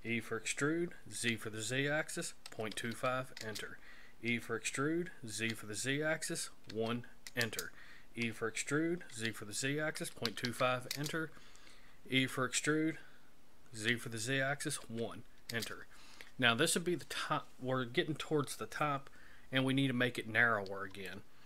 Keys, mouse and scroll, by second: 0.1 e, 4.3 e, 8.2 e, 12.2 e, 21.1 shift+middle click.